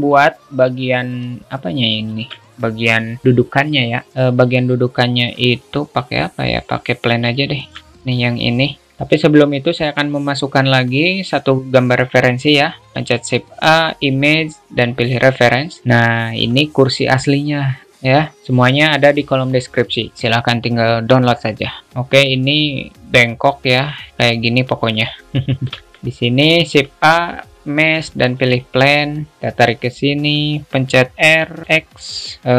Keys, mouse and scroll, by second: 0.1 shift+middle click, 2.3 alt+shift+middle click, 7.6-7.9 alt+shift+middle drag, 9.1 alt+shift+middle click, 13.2 shift+a, 15.9 click, 16.5 shift+middle click, 22.0-22.5 alt+shift+middle drag, 25.5-25.9 alt+shift+middle drag, 26.0 alt+shift+middle click, 29.4-30.8 drag.